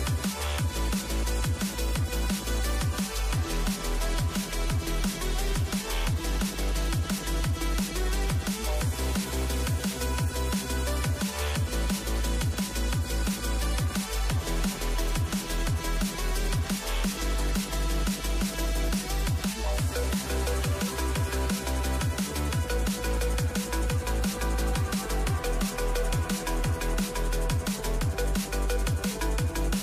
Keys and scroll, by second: 0.0 Return, 0.6-1.6 typing, 15.9-17.1 typing, 17.3 Return, 19.8 ctrl+l, 20.8-22.4 typing, 22.5 Tab, 23.0 Return, 23.9-24.6 typing, 25.7-27.1 typing.